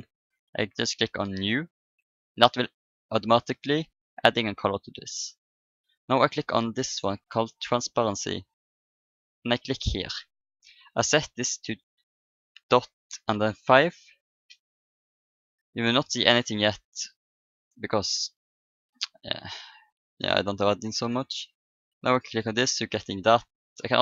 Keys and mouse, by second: 1.2-3.0 drag, 2.9-6.2 middle drag, 7.4-9.3 drag, 9.9-11.6 drag, 16.5-20.1 middle drag, 21.9-24.0 drag.